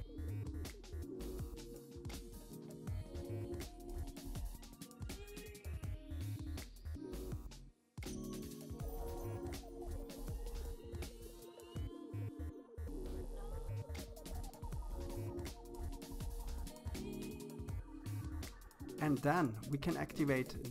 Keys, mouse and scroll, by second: 2.0-2.4 scroll down 1, 2.4-3.9 middle drag, 4.8-6.3 drag, 6.7-7.1 scroll down 2, 7.1-8.7 middle drag, 9.0-10.2 scroll up 2, 10.2 scroll up 1, 10.3-11.7 drag, 12.6-13.1 scroll down 4, 13.1-14.7 middle drag, 16.0-17.6 middle drag, 18.9 click, 19.9 KP_3, 20.5-20.7 scroll up 6.